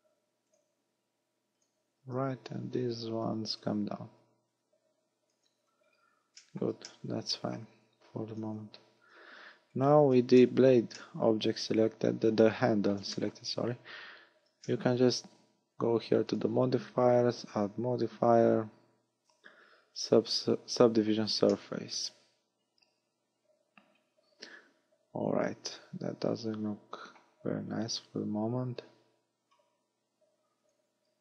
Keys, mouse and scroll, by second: 1.7 click, 2.2 a, 3.3 b, 4.3 click, 5.6 a, 5.9-6.2 scroll down 6, 6.4 shift+middle click, 6.9 middle click, 7.9 a, 8.3 a, 8.7 Tab, 9.0-9.8 scroll down 4, 9.8 right click, 10.1 z, 10.5 middle click, 11.0 middle click, 13.2 shift+middle click, 14.1-14.7 scroll up 3, 14.7 shift+middle click, 16.3 click, 17.5 click, 21.6 middle click, 27.5 scroll up 5, 30.7 click.